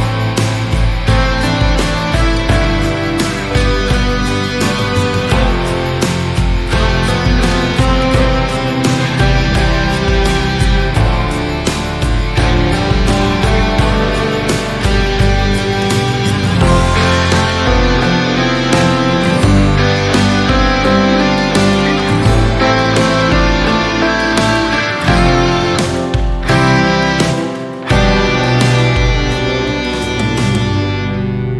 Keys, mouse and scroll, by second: 0.4-0.7 scroll up 1, 0.7-3.0 middle drag, 3.3-4.0 scroll down 1, 4.0 KP_3, 4.6-5.0 scroll up 2, 5.0 scroll down 1, 5.3-6.8 shift+middle drag, 6.8 KP_3, 7.0 Tab, 8.4 middle click, 9.1 KP_3, 9.4 alt+z, 10.0 click, 11.1 click, 11.4 click, 12.0 x, 13.0 shift+middle click, 13.7 Tab, 14.9 KP_3, 15.5-15.9 scroll up 1, 15.9 drag, 16.2-16.7 shift+middle drag, 16.7 Tab, 17.3 click, 19.1 click, 19.5 s, 21.0-21.7 drag, 21.7 s, 26.2 Tab, 26.4-26.9 middle drag, 26.9 drag, 27.7 alt+z, 28.0 shift+middle click, 28.3 click, 28.5 scroll down 2, 28.6-29.2 middle drag, 29.2-29.6 scroll up 3, 29.6-29.9 shift+middle drag, 29.9 click, 30.1 Tab, 30.6 click.